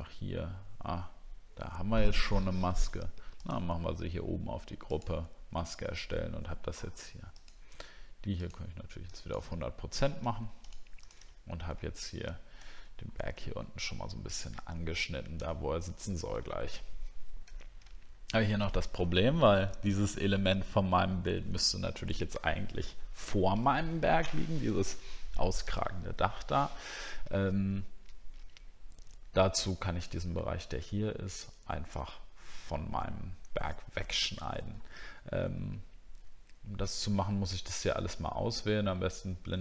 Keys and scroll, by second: 11.3 alt+scroll down 1, 13.0 alt+scroll up 1, 15.5 alt+scroll down 1, 18.0 alt+scroll up 1.